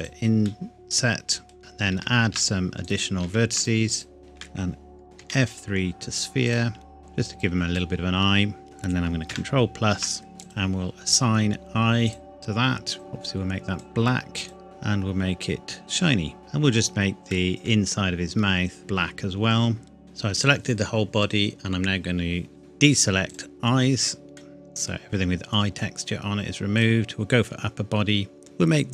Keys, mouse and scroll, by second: 0.4 middle click, 1.6 right click, 1.9 ctrl+r, 2.4 click, 3.2 ctrl+r, 3.6 click, 3.6 click, 4.2 shift+click, 5.2 F3, 6.5 click, 7.0 g, 7.2 click, 7.8 middle click, 9.3 ctrl+KP_Add, 10.4 click, 14.6-15.8 scroll down 1, 15.8 click, 16.4 Tab, 17.2-17.6 scroll up 1, 17.6 middle click, 18.8 ctrl+KP_Add, 23.3 click, 24.4 middle click, 26.8 click, 28.3-28.9 scroll down 1.